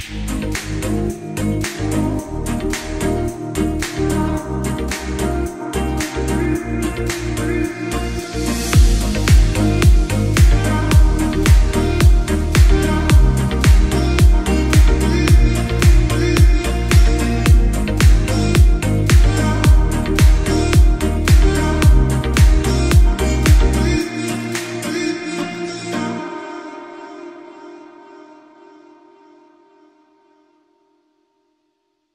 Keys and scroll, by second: 0.8 F10, 4.0 space, 4.2 Escape, 7.0 Escape, 7.2 F4, 13.0 shift+Page_Up, 13.4 shift+F2, 13.8 F3, 17.1 F3, 18.7 Escape, 25.9 F8, 26.3 BackSpace, 27.8 shift+s, 28.0 shift+a, 28.6 shift+l, 28.8 shift+e, 29.5 ctrl+space.